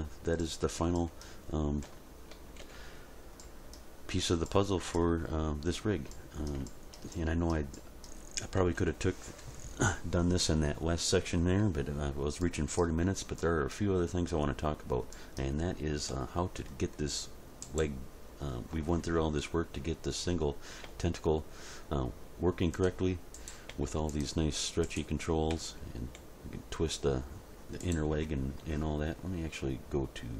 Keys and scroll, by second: 1.8 End, 2.3 Page_Down, 2.6 End, 8.6 End, 8.9 Page_Down, 9.2 End, 20.8 g, 23.7 g, 25.5 r.